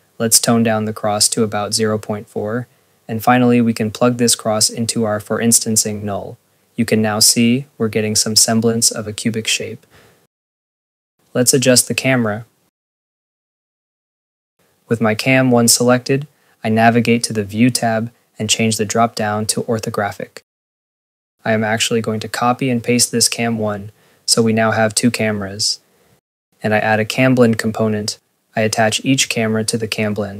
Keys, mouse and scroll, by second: 1.4 click, 4.0 click, 5.2 click, 6.3 ctrl+s, 10.9 click, 12.4 scroll, 12.9 click, 13.4 scroll, 14.0 click, 15.7 click, 16.4 ctrl+a, 16.6 click, 19.6 click, 21.8 click, 22.4 ctrl+c, 22.9 ctrl+v, 23.4 click, 24.3 click, 24.9 Tab, 25.8 click, 29.0 click.